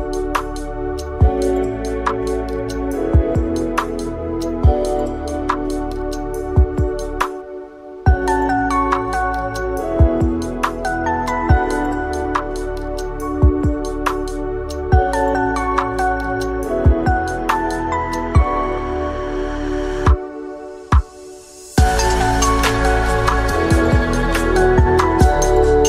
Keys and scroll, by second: 2.5 ctrl+s, 4.8 Tab, 7.2 ctrl+z, 7.5 Delete, 9.0 Tab, 11.5 u, 11.7 Tab, 16.5 8, 17.5 ctrl+s, 17.7 F2, 22.7 F2.